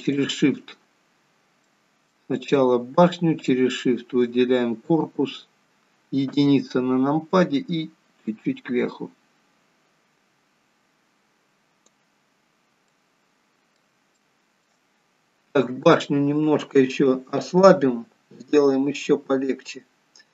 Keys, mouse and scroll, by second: 0.1 shift+click, 1.6 middle click, 2.2 click, 3.4 shift+click, 6.3 KP_1, 8.2 click, 12.4-12.9 scroll down 2, 12.9 middle click, 14.2 shift+middle click, 14.9-15.4 scroll up 4, 15.5 click.